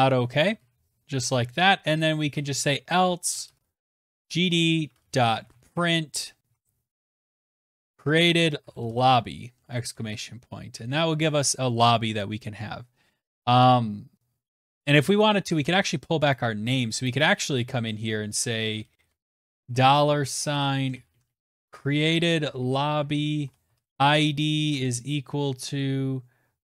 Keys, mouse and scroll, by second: 0.0-9.4 typing, 1.2 Down, 10.1 Right, 15.6 click, 16.3 click, 17.2 Left, 17.3-18.1 Left, 18.3 Left, 18.4 Right, 18.7 shift+4, 18.9 Right, 19.1 Right, 19.3 Left, 19.5 Left, 19.7 BackSpace, 20.0 Right, 20.1 Right, 20.3 Right, 20.5 Right, 20.6 Right, 20.8 Right, 21.1 Right, 21.1 Right, 21.4 Right, 21.6 Right, 21.9 Right, 22.1 Right, 22.2 Right, 22.5 Right, 22.9 typing, 24.9 shift+[, 26.2 shift+].